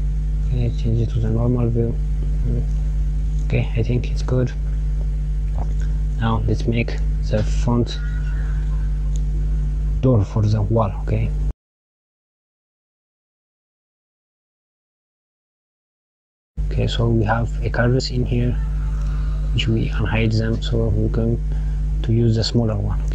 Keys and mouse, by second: 0.1 click, 1.8 click, 7.1 KP_1, 11.3 click, 15.8 click, 16.7 click.